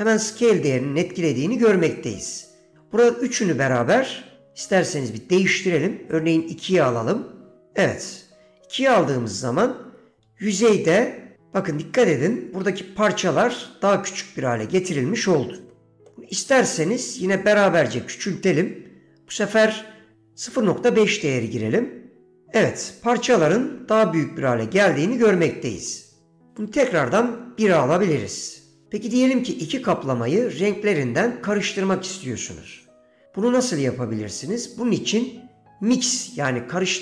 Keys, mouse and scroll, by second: 0.2 middle click, 2.5-7.7 drag, 11.2 shift+middle click, 16.0 shift+middle click, 16.4 click, 26.7-28.4 drag.